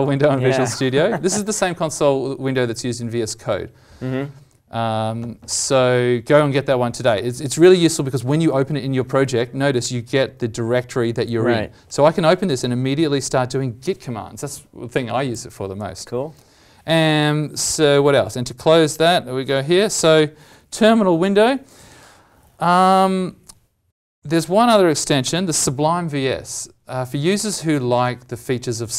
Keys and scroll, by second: 19.7 alt+Tab.